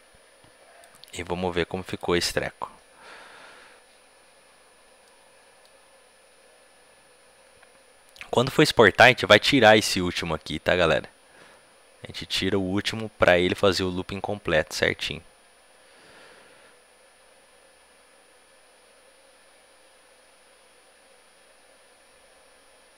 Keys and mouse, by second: 5.0-6.8 middle drag.